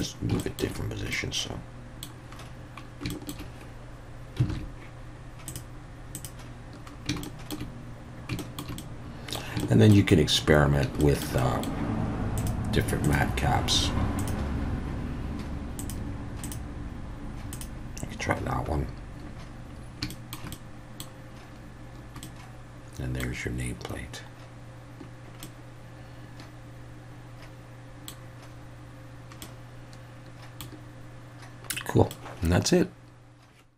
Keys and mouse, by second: 0.4 shift+middle click, 1.1-2.1 middle drag, 3.2 shift+middle click, 4.5 alt+a, 5.5 click, 6.1 click, 7.2 shift+middle click, 8.4 shift+middle drag, 8.8-9.4 middle drag, 9.7 shift+middle click, 11.0 shift+middle click, 11.4 middle click, 12.4-14.7 drag, 15.8-17.7 drag, 20.1 shift+middle click, 20.5-21.0 middle drag, 22.2-23.2 middle drag, 25.4-28.1 middle drag, 29.4-30.6 middle drag, 31.7-32.1 middle drag.